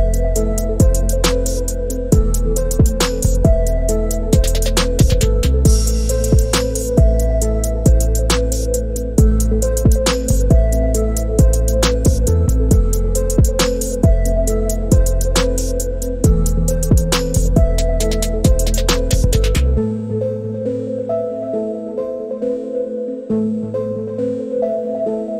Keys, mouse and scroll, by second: 3.4 click, 4.9 click, 7.4-12.0 drag, 15.9 click, 16.9 click, 22.2 click.